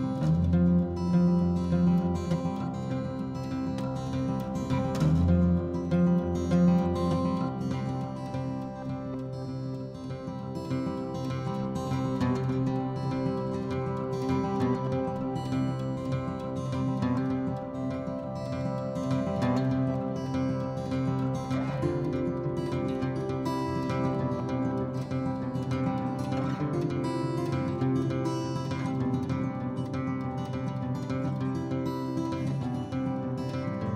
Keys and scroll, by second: 0.9 e, 2.0 Escape, 4.9-6.5 typing, 6.2 Return, 7.6-10.0 typing, 11.6-12.8 typing, 13.9-14.7 typing, 15.8-20.2 typing, 22.2-26.3 typing, 23.7 Escape, 31.3-32.7 typing.